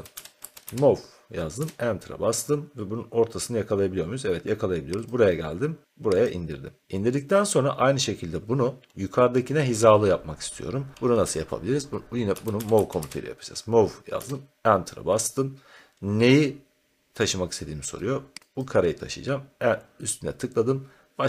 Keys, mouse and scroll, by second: 0.0-1.1 typing, 1.5 Return, 5.0 click, 5.8 click, 7.2-8.4 middle drag, 8.4-10.8 scroll, 10.9-12.0 middle drag, 12.0-13.4 typing, 14.1 Return, 18.5-21.2 drag.